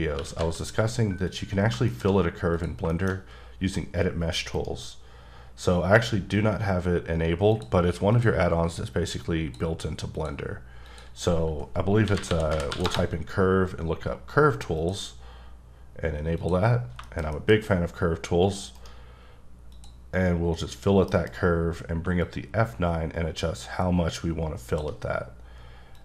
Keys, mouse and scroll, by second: 0.0-0.4 typing, 1.3 click, 1.8 shift+middle click, 2.5 click, 2.9 shift+middle click, 3.1-4.5 scroll up 2, 4.5 right click, 7.5 click, 8.1 click, 9.1 click, 10.1 click, 10.9 click, 12.0-12.7 typing, 12.8 Return, 14.8 click, 16.4 click, 16.8 scroll down 2, 17.0 shift+middle click, 17.6-18.7 scroll up 1, 18.7 right click, 19.7 click, 21.1 F9, 22.1 shift+scroll up 1, 22.2 shift+click, 25.3-25.9 scroll up 1, 25.9 click.